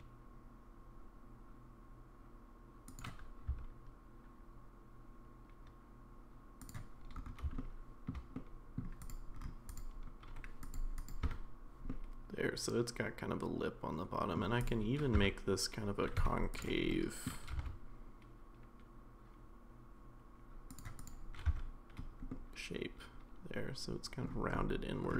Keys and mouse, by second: 3.5 s, 7.6 shift+middle click, 8.3 middle click, 9.0 click, 9.7 click, 10.7 click, 11.2 Tab, 11.9-14.3 middle drag, 14.6 click, 15.2 Tab, 16.2 1, 16.6 click, 16.9 middle click, 17.5 g, 21.0 click, 21.5 Tab, 22.3-24.3 middle drag.